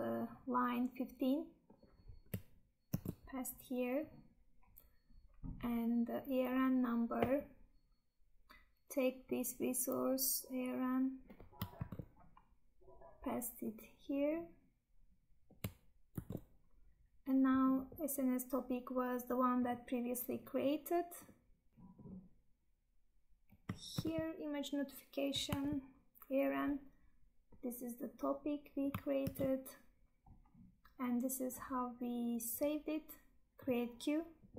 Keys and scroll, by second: 2.9 ctrl+v, 11.7 ctrl+c, 16.1 ctrl+v, 23.9 ctrl+c, 26.7 Tab, 29.2 ctrl+v.